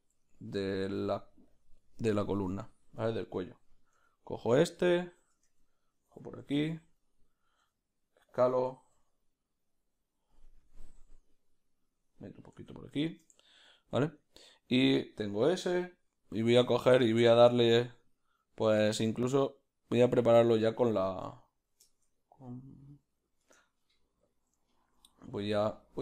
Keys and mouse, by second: 1.1 s, 5.5 Tab, 6.4 ctrl+r, 12.7 Tab, 13.1-26.0 ctrl+shift+middle drag, 24.3 b.